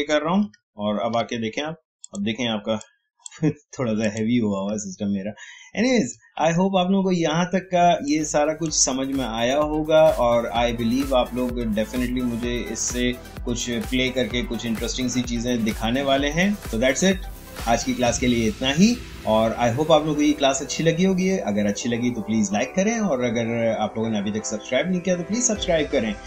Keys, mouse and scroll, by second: 0.5-1.1 alt+scroll down 1, 2.0 click, 4.9-5.4 alt+scroll down 1, 5.4 alt+scroll up 1, 6.4 Tab.